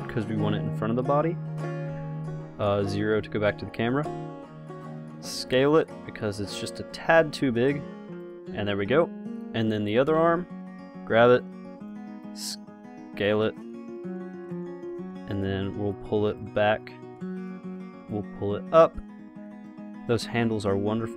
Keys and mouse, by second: 0.8-2.2 drag, 2.2 KP_0, 5.6 s, 7.2 g, 10.0-11.2 drag, 10.6 g, 12.2 middle click, 12.8 s, 14.7 click.